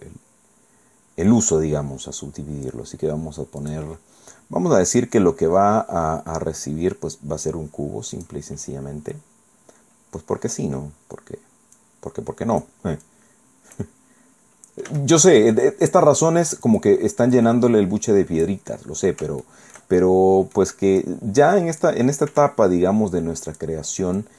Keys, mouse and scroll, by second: 3.6 click, 8.1 click, 8.5 scroll down 2, 9.5 scroll down 1, 11.7-12.8 drag, 13.1 click, 14.1 scroll up 1, 14.9 s, 16.7 click, 17.3-18.7 drag, 19.4 shift+middle click, 20.3 click, 21.0-22.0 drag, 22.3 s, 23.5 click, 24.2 click.